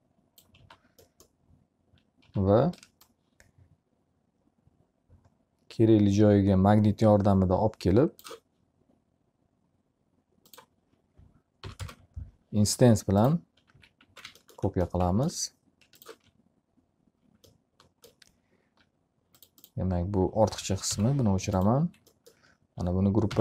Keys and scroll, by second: 0.8 s, 11.9 1, 12.5 0, 14.4 x, 14.8 z, 14.9 alt+a, 21.2 Delete.